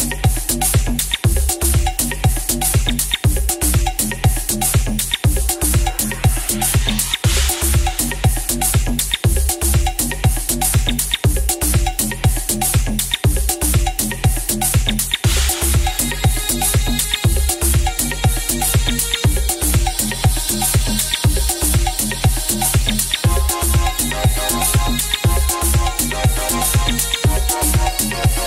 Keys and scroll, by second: 1.4 ctrl+z, 3.0 ctrl+z, 3.2 ctrl+z, 3.5 ctrl+z, 4.6 ctrl+z, 5.6 ctrl+z, 6.0 ctrl+z, 6.7 ctrl+z, 7.2 ctrl+z.